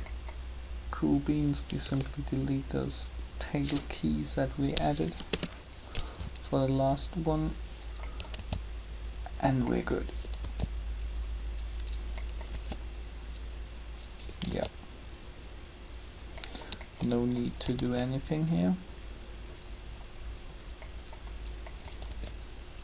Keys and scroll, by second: 1.9 b, 4.9 Delete, 5.1 Return, 8.4 alt+a, 10.4 alt+a, 12.5 alt+a, 17.8 alt+a, 21.9 alt+a.